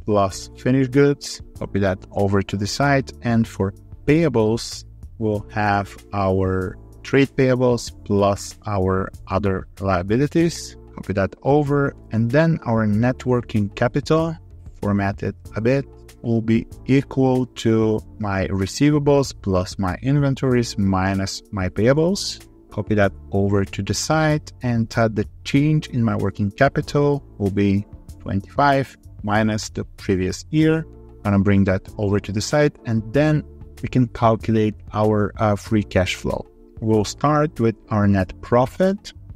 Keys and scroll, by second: 2.2 ctrl+r, 11.0 ctrl+r, 22.5 ctrl+r, 31.1 ctrl+r.